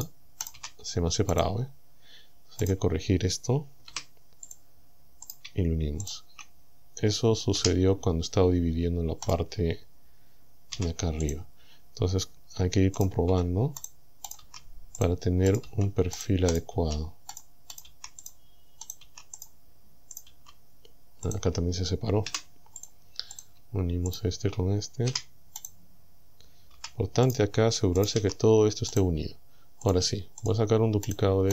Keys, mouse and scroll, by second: 0.0 right click, 0.5 right click, 0.6 g, 1.4 right click, 2.7 right click, 3.9 Delete, 4.5 right click, 5.3 shift+right click, 6.1 shift+right click, 7.6 f, 9.3 right click, 10.7 g, 11.3 right click, 13.0 right click, 13.3 g, 13.9 right click, 14.3 right click, 14.5 g, 15.0 right click, 15.5 right click, 15.7 g, 16.2 right click, 16.6 right click, 16.8 g, 17.4 right click, 17.8 right click, 17.9 g, 18.3 right click, 18.9 right click, 19.1 g, 19.4 right click, 20.2 right click, 20.3 g, 21.3 right click, 22.3 Delete, 22.9 click, 23.4 right click, 24.1 shift+right click, 25.1 f, 25.6 right click, 26.8 g, 27.3 right click, 28.0 right click, 28.2 g, 29.0 right click, 29.9 shift+right click, 30.5 shift+right click, 31.1 shift+right click.